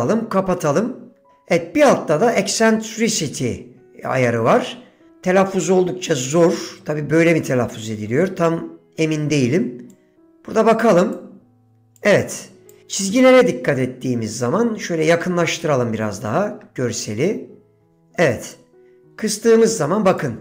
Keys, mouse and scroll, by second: 10.0 click, 10.9-11.3 drag, 12.1 click, 18.6-20.4 drag.